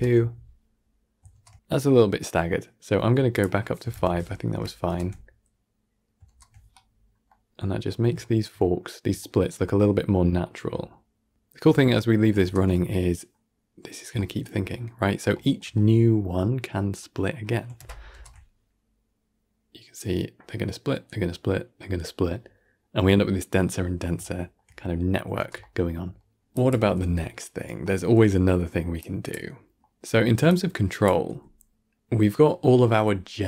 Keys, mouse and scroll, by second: 1.2 shift+space, 3.2-4.4 drag, 4.4 shift+Left, 4.8 shift+space, 6.1 shift+space, 6.7-7.1 scroll down 6, 7.2-7.9 middle drag, 7.9 scroll down 1, 8.1-8.8 shift+middle drag, 8.8 scroll down 1, 9.1-10.1 shift+middle drag, 10.1 scroll down 1, 10.3-12.3 shift+middle drag, 12.3 shift+space, 12.6-14.4 middle drag, 14.4 scroll down 2, 14.6-15.1 middle drag, 15.1 scroll down 1, 15.2-16.2 shift+middle drag, 16.2-16.8 scroll up 4, 16.8-17.7 scroll down 4, 17.7 shift+Left, 18.0 shift+space, 24.1-25.3 shift+middle drag, 25.3 shift+space, 25.5-26.4 middle drag, 26.4 scroll down 10, 26.4 drag, 26.7 ctrl+x, 28.0 middle click, 28.9 click, 29.4-30.4 middle drag, 30.4 click, 31.2 g.